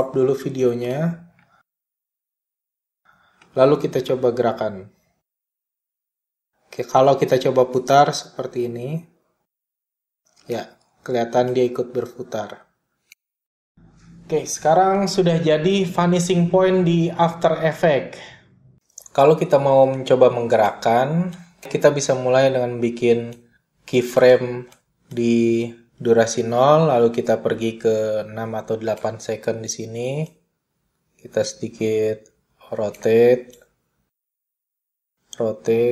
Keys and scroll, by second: 14.2 super+z.